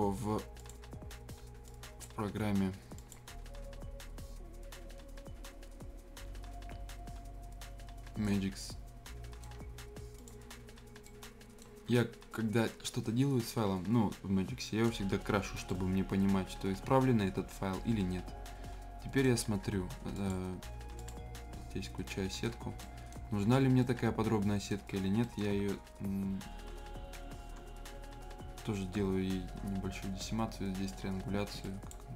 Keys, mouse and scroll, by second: 8.2-10.1 right drag, 10.1 click, 11.0-20.1 right drag, 20.1 click, 21.5 scroll up 1, 22.0 right click, 22.5 scroll down 1, 22.8 right click, 23.2 scroll up 1, 23.8 right click, 24.8 scroll down 1, 25.2 right click, 26.7-27.3 ctrl+scroll down 2, 27.6 scroll up 1, 28.9 ctrl+t, 30.2-31.6 drag.